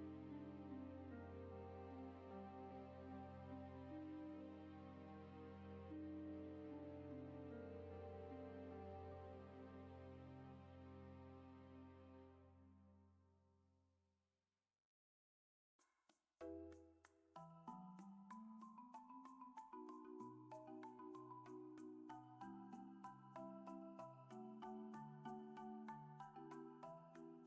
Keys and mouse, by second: 0.0 ctrl+z, 0.8 click, 2.1 KP_0, 6.5 n, 7.1 F6, 9.1 click, 10.1 click, 11.9-16.0 drag, 17.0-20.0 drag, 20.4 Tab, 21.1 middle click, 22.1 click, 22.6 a, 23.0 middle click, 26.6-27.4 middle drag.